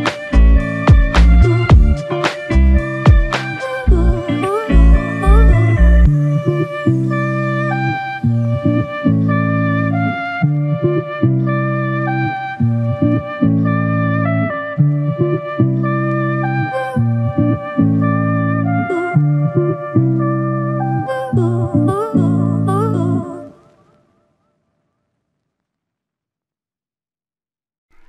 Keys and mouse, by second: 5.3 shift+click, 7.0 alt+m, 10.2 alt+m, 11.7 shift+click, 14.8-15.8 typing, 16.6 double click, 23.8 double click, 26.3 typing.